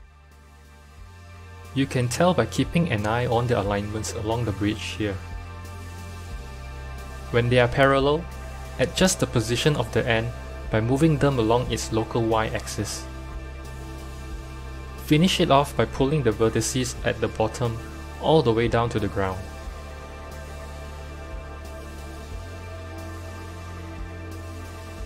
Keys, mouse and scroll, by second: 7.0-8.0 shift+middle drag, 8.0-8.5 scroll down 1, 8.5 Tab, 9.0 click, 9.9 g, 13.4 KP_1, 14.2-14.9 scroll down 3, 14.9 1, 15.2 click, 15.9 g, 18.8 Tab, 22.3 click, 23.5-25.0 drag.